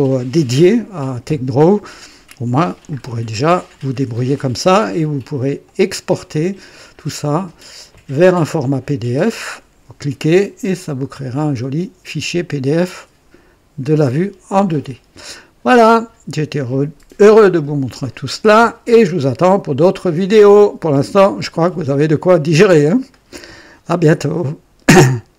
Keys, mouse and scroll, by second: 1.1 scroll up 2, 2.6 scroll up 2, 5.5 click, 23.0 right click, 23.7 right click.